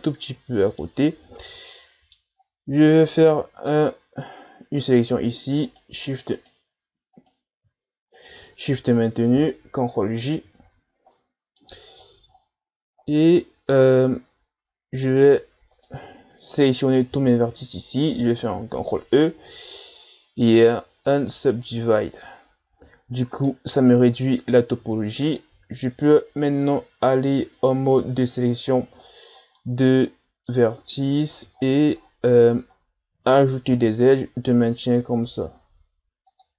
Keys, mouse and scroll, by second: 0.2-1.4 middle drag, 1.4 scroll down 1, 1.7 middle click, 2.4-2.8 scroll up 1, 2.8-3.4 scroll down 4, 3.4 Tab, 5.7-9.5 shift+right drag, 9.5 ctrl+j, 10.6 Tab, 11.2 middle click, 11.9-13.9 ctrl+scroll up 17, 15.7-17.1 right drag, 17.1 l, 18.6 ctrl+e, 22.2-25.5 middle drag, 25.5 ctrl+Tab, 28.3-29.5 scroll down 16, 29.6-30.7 middle drag, 30.7-31.3 scroll up 8, 31.6-32.0 shift+scroll down 3, 32.0-32.6 ctrl+scroll up 7, 33.7 ctrl+r.